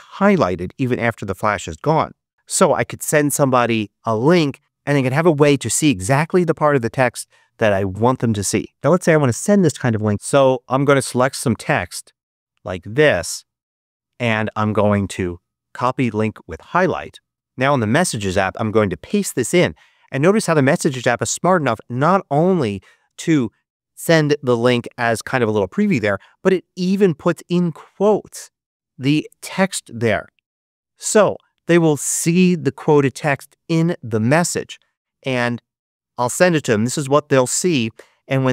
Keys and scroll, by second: 19.0 super+v, 35.3 Return.